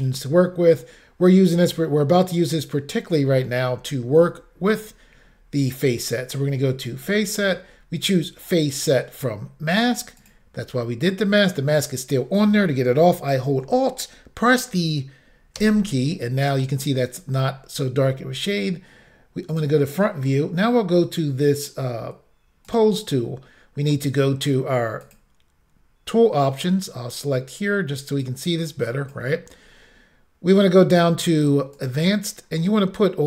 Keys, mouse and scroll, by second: 6.9 click, 10.2 click, 15.6 alt+m, 19.6 click, 22.7 click, 25.1 click, 28.2 click, 29.6-30.2 scroll down 1, 30.2-30.7 scroll down 2, 31.8 click, 32.4-33.1 scroll down 1.